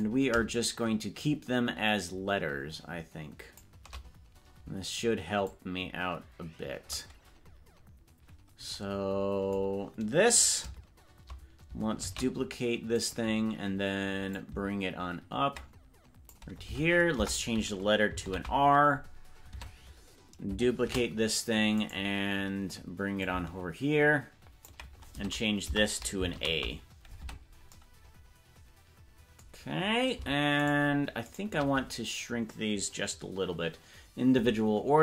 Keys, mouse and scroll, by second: 1.2-3.6 shift+drag, 5.4-7.0 drag, 12.5 shift+d, 14.3-16.4 drag, 16.8 Tab, 17.2 BackSpace, 18.4 shift+r, 19.8 Tab, 21.4 shift+d, 23.2-24.7 ctrl+drag, 25.2 Tab, 25.8 BackSpace, 26.4 shift+a, 27.4 Tab, 30.8 shift+right click, 31.4 shift+right click, 34.4 s.